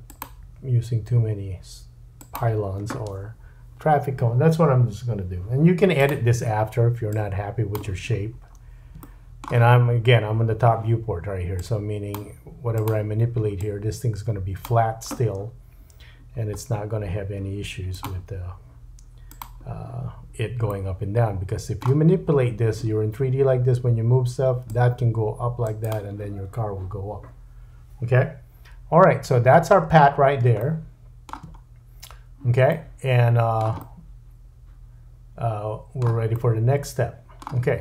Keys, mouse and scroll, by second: 0.4 e, 5.9 click, 6.0-7.1 middle drag, 7.1-12.9 drag, 8.2-8.5 scroll up 2, 9.0 shift+middle click, 12.9 middle click, 13.6-19.4 drag, 19.4-24.7 middle drag, 24.7-25.9 drag, 25.9-37.8 middle drag, 29.2 Tab, 29.8-30.4 scroll up 5, 31.6-32.2 scroll up 5.